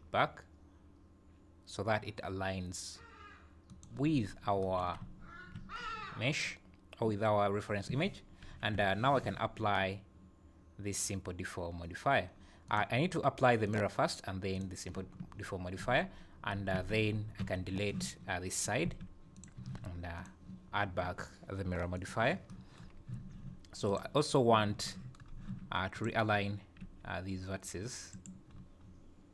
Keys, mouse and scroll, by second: 8.5 KP_4, 8.6 KP_1, 12.7 click, 13.7 click, 14.9 click, 15.8 Tab, 16.8 alt+a, 17.4 b, 18.9 x, 19.6 Tab, 20.2 click, 23.0 scroll up 2, 23.1 Tab, 23.9 click, 25.3 scroll up 1, 25.9 click, 26.8 g, 28.5-28.8 scroll up 3, 28.8 scroll down 4.